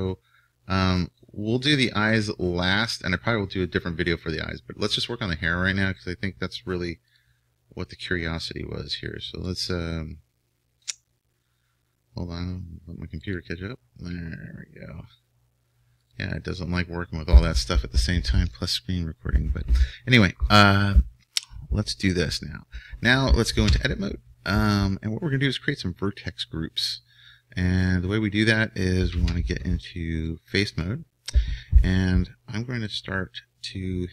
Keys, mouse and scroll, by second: 13.3-15.5 drag, 23.8 Tab, 29.2 ctrl+Tab, 30.6 ctrl+Tab.